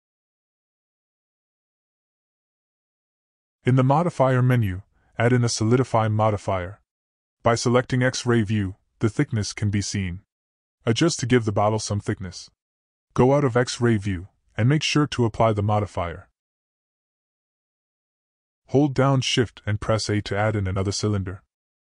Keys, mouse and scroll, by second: 0.5-1.2 middle drag, 1.2 click, 4.0-6.2 drag, 8.3 click, 9.3 middle click, 10.1-11.8 drag, 14.3 click, 15.3-15.8 drag, 18.0 click, 19.5 shift+middle click, 19.8 shift+a.